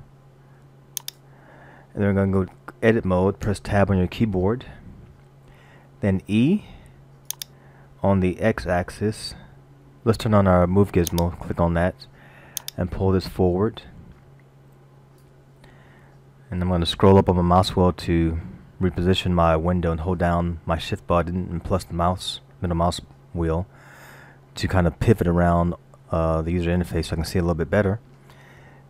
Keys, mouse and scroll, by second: 4.3 Tab, 6.5 e, 11.1 click, 12.7 click, 16.6-17.2 scroll down 2, 18.5 shift+middle click.